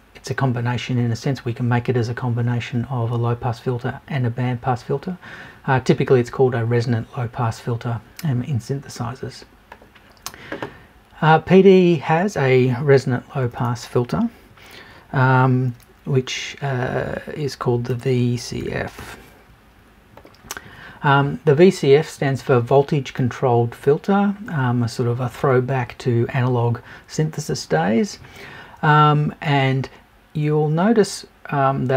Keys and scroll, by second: 13.4 BackSpace.